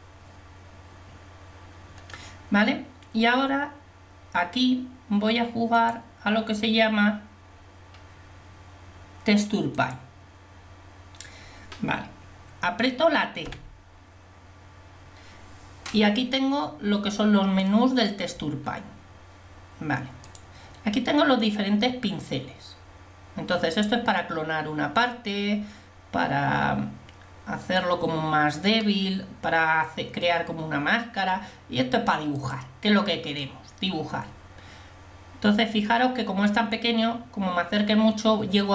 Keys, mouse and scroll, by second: 13.5 t, 33.7-34.9 middle drag.